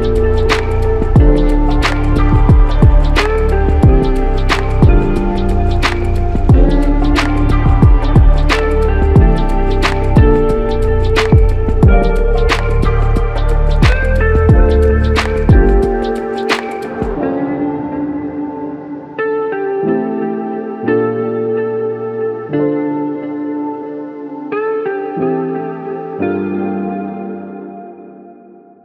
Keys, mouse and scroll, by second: 3.0 ctrl+right click, 4.6 ctrl+right click, 7.6 ctrl+right click, 9.0 ctrl+right click, 10.5 ctrl+right click, 26.7 Return.